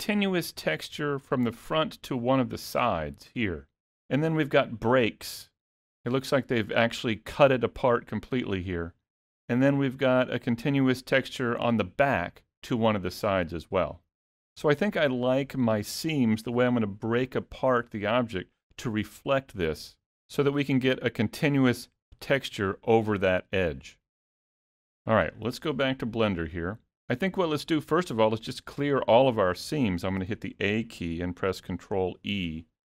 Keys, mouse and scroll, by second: 28.1 middle click, 30.3 a, 32.1 ctrl+e.